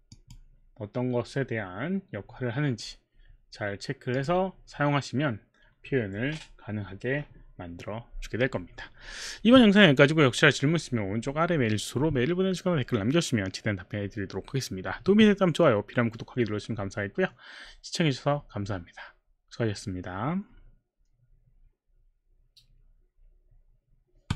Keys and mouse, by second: 4.2 click, 24.3 click.